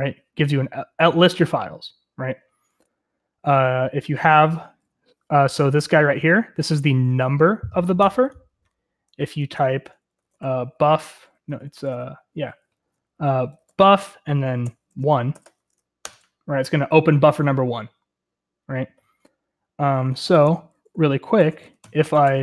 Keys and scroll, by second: 9.4 Return, 9.5-15.4 typing, 16.0 Return, 20.1-22.4 typing.